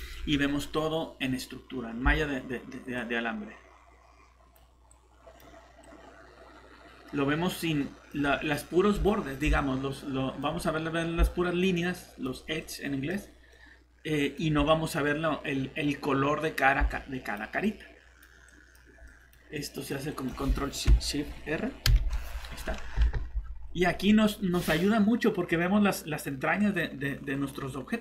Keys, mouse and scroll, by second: 0.4 scroll down 1, 1.5 scroll up 1, 2.9 click, 4.9-5.3 typing, 7.9 typing, 15.2 scroll up 1, 15.2 typing, 16.9 click, 17.3 typing, 21.9 ctrl+shift+r, 23.1 alt+Tab, 24.8-26.6 scroll down 1, 26.6 click.